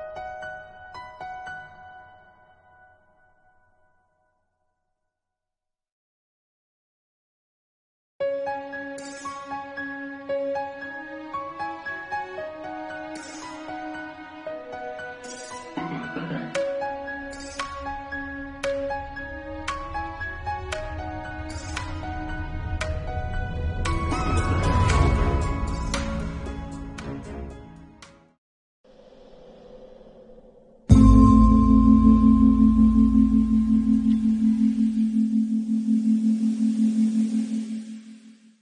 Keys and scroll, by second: 0.7-3.1 typing, 1.4 Return, 2.0 ctrl+alt+z, 3.0 ctrl+alt+z, 5.3 ctrl+u, 8.6 BackSpace, 8.7 7, 8.9 BackSpace, 9.1 8, 9.1 Return, 9.6 ctrl+s, 10.5-11.0 typing, 11.1 Return, 13.2 ], 13.7 2, 15.9 Left, 16.7 Right, 17.1 Left, 18.8 ctrl+u, 21.2 BackSpace, 21.3 8, 21.6 BackSpace, 21.7 9, 22.2 Return.